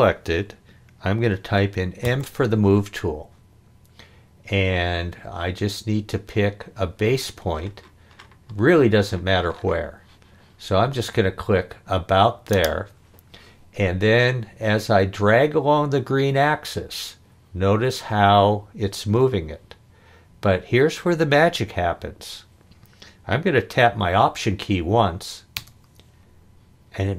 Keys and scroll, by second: 2.0 m.